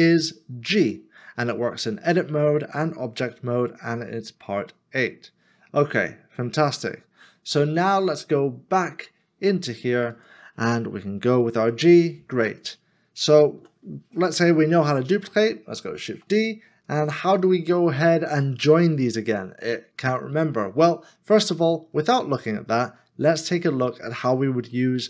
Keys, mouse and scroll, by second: 13.5 ctrl+z.